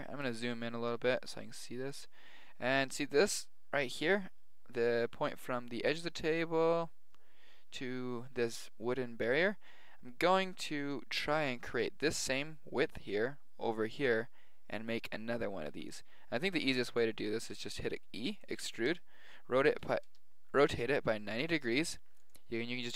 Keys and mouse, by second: 1.6 g, 15.7 a, 16.4 b, 17.5 e, 18.9 r, 21.4 g.